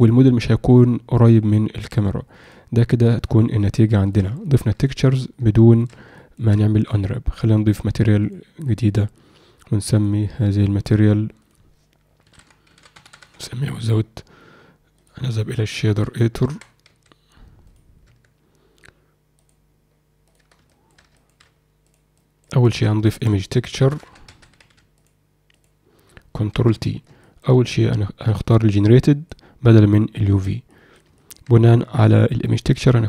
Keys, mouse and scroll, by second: 3.2-4.3 ctrl+alt+middle drag, 4.4 alt+shift+middle drag, 5.5-5.9 alt+shift+middle drag, 6.1 ctrl+middle click, 7.4-9.2 drag, 11.4-13.5 drag, 15.1-16.1 drag, 16.4 Tab, 17.6 click, 18.0 Tab, 19.3-20.3 drag, 20.4 Tab, 20.6 shift+middle click, 21.1 ctrl+alt+middle click, 21.8 click, 22.1 click, 22.6 alt+shift+middle click, 26.5 ctrl+t, 27.2 alt+shift+middle click, 28.2-29.3 drag, 30.1 click, 30.6 click, 31.1 alt+shift+middle click, 32.2 click.